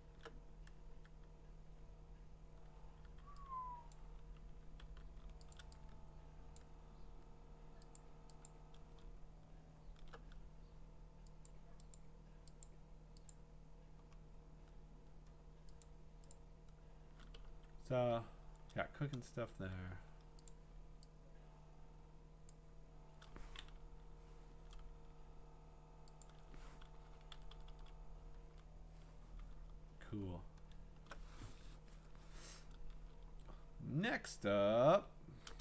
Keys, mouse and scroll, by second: 0.9-2.3 scroll, 0.9 v, 3.0 v, 3.9 click, 4.8 v, 6.6 click, 7.9 click, 8.5 click, 9.2-10.0 scroll, 11.5 click, 11.9 click, 12.6 click, 13.3 click, 14.2-15.0 scroll, 15.0 scroll, 15.8 click, 16.3 click, 17.5-18.1 typing, 20.5 click, 22.5 click, 26.2 ctrl+click, 27.7-28.5 Up, 29.5 alt+Up, 29.6-30.7 scroll, 30.7 scroll down 10, 33.1-33.8 alt+scroll down 6, 33.8-34.3 scroll up 3, 34.3-35.1 scroll.